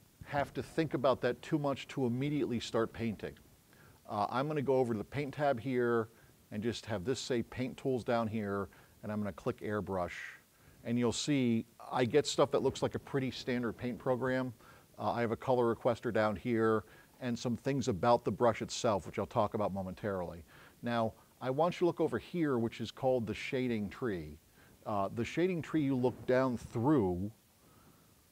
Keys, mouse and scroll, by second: 9.5 click.